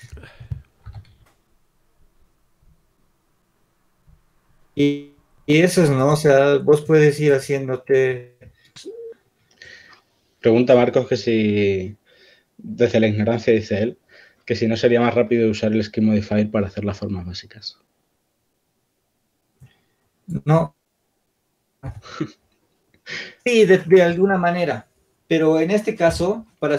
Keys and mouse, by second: 0.8 s, 8.9 click, 10.3 ctrl+z, 10.3 b, 10.9 shift+d, 12.6-14.3 drag, 14.3-17.3 right drag, 17.3 ctrl+z, 23.1 ctrl+z, 23.1 Tab.